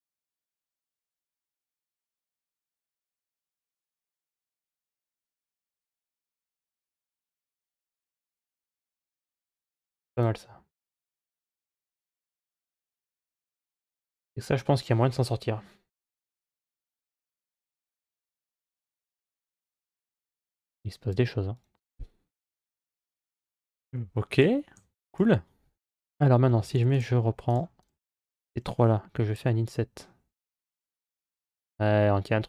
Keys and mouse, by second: 5.3 click, 6.5 click, 7.1 click, 7.5 click, 8.1 click, 9.9 click, 11.5 click, 16.3 click, 18.0 click, 19.2-20.9 drag, 21.3-23.1 drag, 23.4 Tab, 24.1 right click, 24.6 Tab, 24.9 right click, 26.3 3, 26.7 right click, 29.0 i.